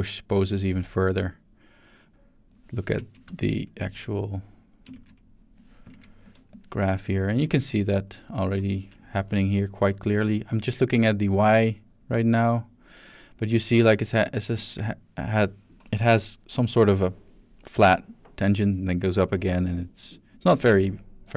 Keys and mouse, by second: 3.4 ctrl+space, 6.5 click, 6.8 shift+click, 7.5 ctrl+middle click, 8.5-10.1 ctrl+shift+middle drag, 10.5-11.7 shift+middle drag, 11.7-14.2 drag, 14.6 click, 15.0-15.4 drag, 21.2-21.3 drag.